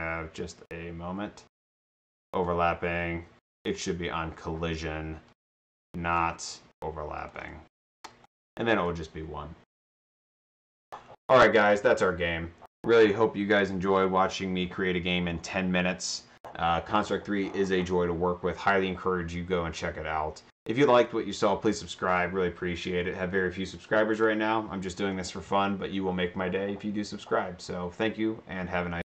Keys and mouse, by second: 2.2 click, 2.3 click, 3.7 click, 7.2 click, 8.3 drag, 8.8 click.